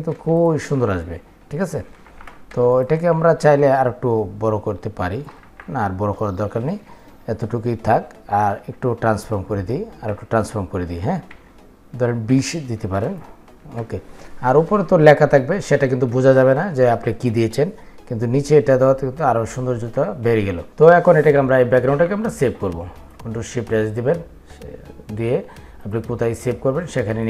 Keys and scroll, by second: 23.0 ctrl+shift+s.